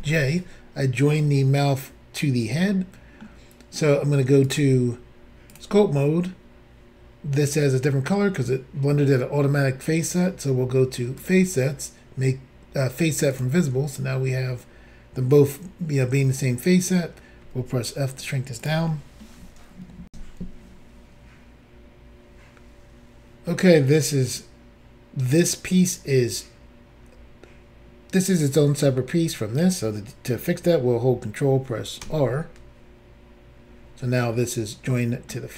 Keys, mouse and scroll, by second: 2.7 shift+middle click, 4.4 click, 5.5 click, 11.2 click, 11.3 click, 13.3 click, 13.4 click, 17.4 f, 18.6 click, 18.7 click, 20.1 Insert, 32.0 ctrl+r, 34.3 middle click.